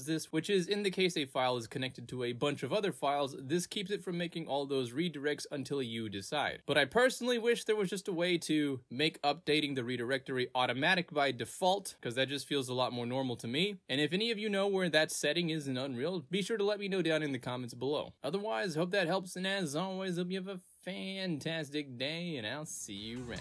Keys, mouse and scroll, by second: 1.5 click, 1.8 click, 1.9 click, 2.7 click, 3.2 click, 4.3 click, 7.3 click, 9.2 click, 11.7 click, 11.8 click, 12.8 click, 14.1-15.4 drag, 16.0 click, 16.9 click, 18.9 click, 19.1 click, 20.2 click, 20.7 click, 22.0 click.